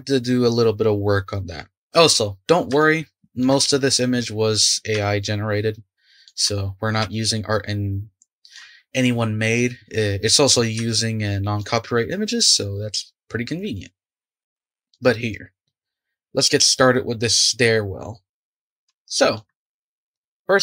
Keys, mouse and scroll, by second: 2.4-2.8 scroll up 2, 2.8-3.7 shift+middle drag, 3.7-4.8 scroll down 2, 5.0-10.1 shift+middle drag, 10.8-13.9 shift+middle drag, 14.3-15.3 shift+middle drag, 15.3-18.5 scroll up 3, 18.5-19.0 scroll down 4, 19.0-20.3 shift+middle drag, 20.3 click.